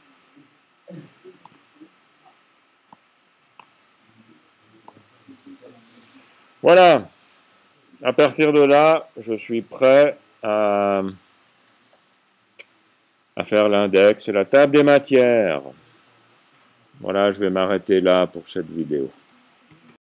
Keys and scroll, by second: 0.0-0.3 typing, 4.4 c, 5.7 v, 7.3-8.6 typing.